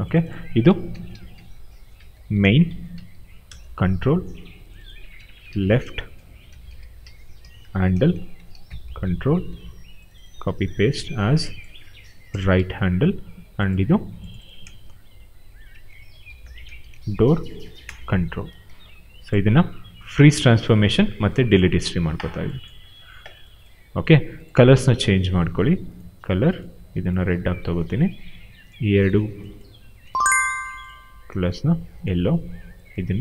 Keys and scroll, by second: 0.6-3.7 typing, 5.2-9.1 typing, 9.2 ctrl+c, 10.7 ctrl+v, 12.2 BackSpace, 12.5 shift+r, 15.4-18.0 typing.